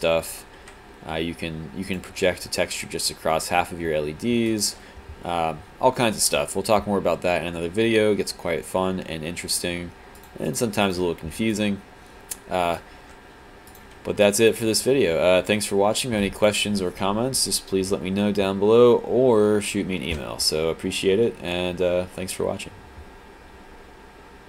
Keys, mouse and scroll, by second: 1.9 click, 2.5 alt+click, 4.5 click, 11.5 alt+click, 14.3 alt+click, 14.8-16.3 alt+drag, 16.5 alt+click.